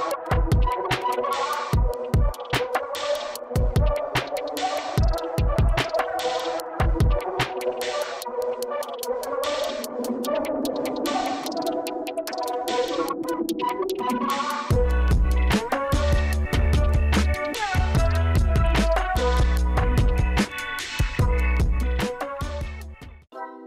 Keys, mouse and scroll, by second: 3.3 super+click, 3.9 super+click, 4.5 super+click, 7.6 super+click, 10.4 super+click.